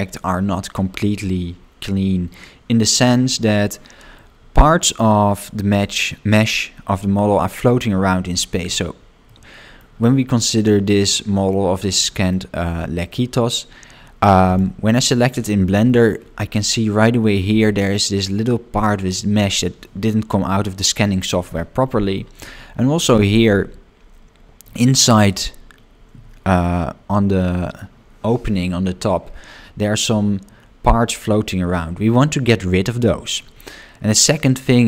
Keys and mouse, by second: 2.3 shift+middle click, 4.1-5.4 middle drag, 9.2 middle click, 11.0 shift+middle click, 12.0 shift+middle click, 13.1 middle click, 15.1 click, 15.8 shift+middle click, 22.1 shift+middle click, 23.5-24.6 middle drag, 24.8 shift+middle click, 34.3 middle click.